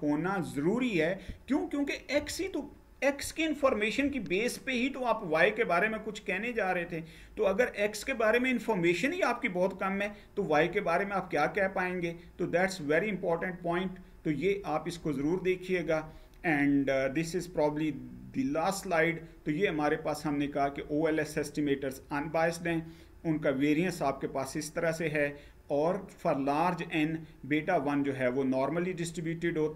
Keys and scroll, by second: 15.6 Page_Down.